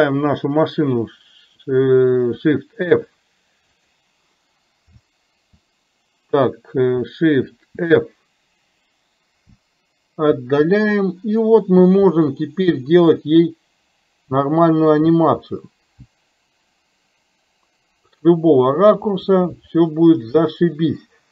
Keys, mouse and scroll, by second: 4.9 Down, 7.7 shift+f.